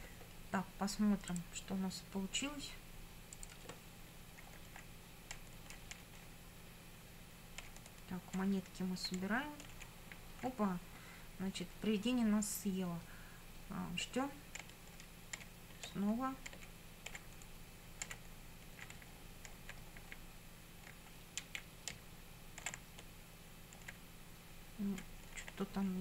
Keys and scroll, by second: 4.5 Up, 4.9 Left, 5.4 Up, 5.8 Left, 6.0 Up, 6.2 Left, 7.6 Up, 8.5 Right, 9.2 Up, 9.7 Left, 9.8 Up, 14.6 Up, 15.0 Left, 15.4 Up, 15.9 Left, 16.5 Up, 17.1 Left, 18.0 Up, 19.0 Right, 19.6 Up, 19.8 Right, 21.4 Down, 21.9 Right, 22.7 Up, 23.9 Left, 25.4 Up.